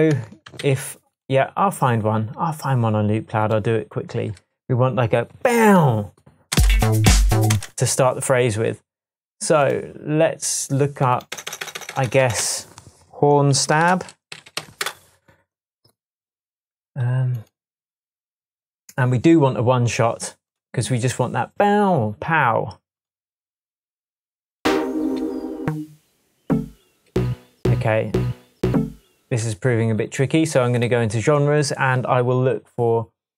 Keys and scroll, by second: 0.7 super+s, 6.6 space, 7.6 space, 11.4 BackSpace, 13.5-15.1 typing, 25.2 Down, 26.4 Down, 27.1 Down, 28.7 Up, 29.3 space.